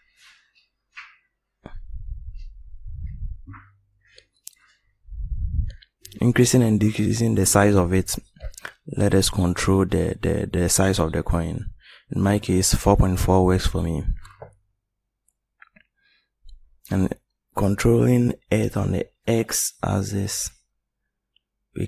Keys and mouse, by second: 1.2 middle click, 5.3-7.0 drag, 7.7 click.